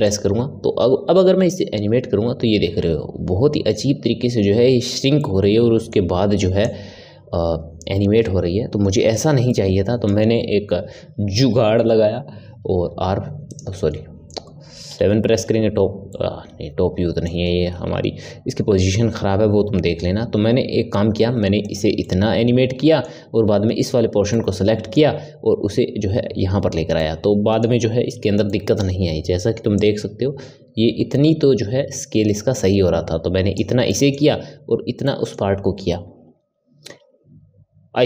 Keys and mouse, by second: 1.4-4.5 drag, 5.1-6.6 middle drag, 6.6-9.4 drag, 9.4-11.1 middle drag, 11.1 Tab, 12.7 r, 13.7-14.8 middle drag, 14.8 KP_7, 16.0-17.9 middle drag, 17.9 r, 22.0-28.1 middle drag, 28.1 Tab, 28.4-29.7 middle drag, 29.7-32.7 drag, 33.8-38.0 middle drag.